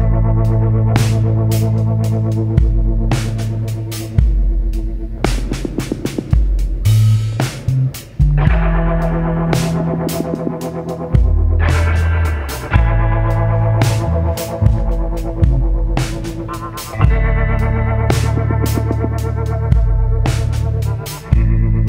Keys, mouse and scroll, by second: 0.5 click, 1.8 click, 2.8 Delete, 4.1 click, 5.4 shift+click, 6.6 shift+click, 8.5 click, 10.0 click, 15.2 click, 17.1-17.9 drag, 18.7 ctrl+z, 19.5 click, 21.0 shift+click.